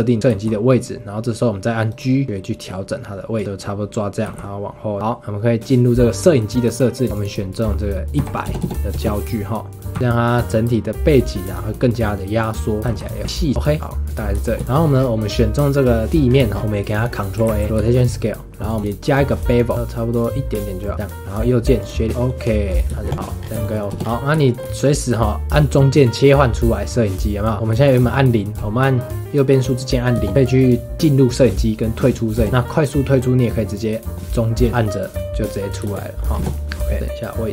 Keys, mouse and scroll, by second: 0.3 g, 2.2 g, 4.2 g, 6.5 click, 7.1-8.6 drag, 8.6 KP_0, 9.9 g, 12.8 g, 13.2 g, 14.1 click, 14.4 shift+middle drag, 14.7 shift+middle drag, 14.9 scroll up 4, 16.1 middle click, 16.3 scroll down 1, 16.5-16.9 scroll up 2, 16.9 click, 17.4 ctrl+a, 17.8 shift+middle click, 18.7-21.3 drag, 21.3-22.1 right drag, 22.1-22.6 shift+middle drag, 22.6 click, 22.9 shift+middle drag, 23.1 click, 23.1 middle drag, 23.4 scroll down 3, 23.6 shift+middle click, 24.0 KP_0, 24.1 scroll down 2, 24.4-27.7 shift+middle drag, 30.1 KP_0, 30.3 KP_0, 32.3 KP_0, 32.5 KP_0, 34.1-36.3 middle drag, 36.3 scroll down 1, 36.5 KP_0, 36.9 g.